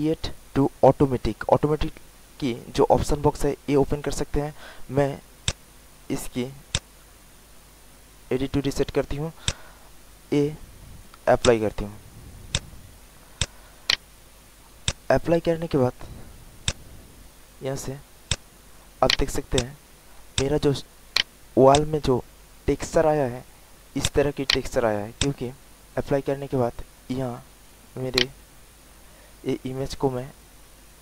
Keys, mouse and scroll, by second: 13.8 alt+right click, 14.4 alt+middle click, 14.8 alt+click, 15.5 alt+middle click, 16.6-18.0 drag, 19.1 alt+right click, 19.5 alt+click, 19.9 alt+middle click, 20.7 alt+middle click, 21.4 alt+right click, 21.7 alt+click, 23.9 alt+click, 25.1 alt+click, 25.6 alt+right click, 27.4 alt+middle click, 28.1 alt+right click.